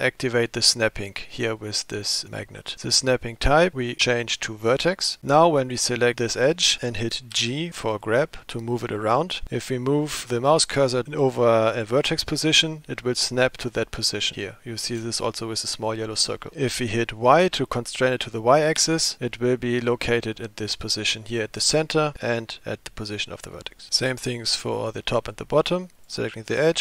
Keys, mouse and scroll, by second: 2.6-5.2 drag, 5.6 click, 7.4 g, 26.0 click.